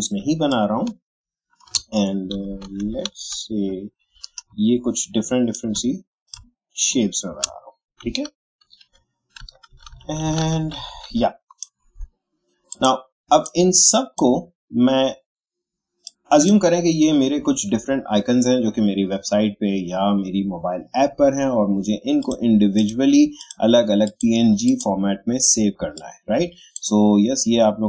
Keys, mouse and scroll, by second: 0.5-2.3 shift+drag, 2.3 Down, 6.3-8.0 drag, 8.0 Up, 12.7-19.0 drag, 22.2-27.8 drag.